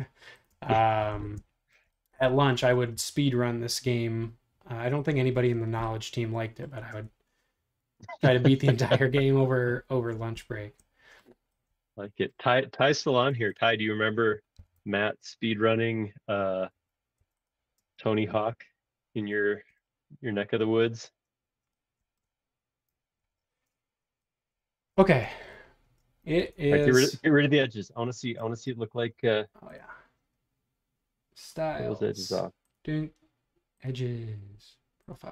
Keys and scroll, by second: 0.4 Up, 0.5 space, 13.3 space, 14.5 b, 17.8 space, 18.0 o, 23.2 super+7, 26.6 super+Tab.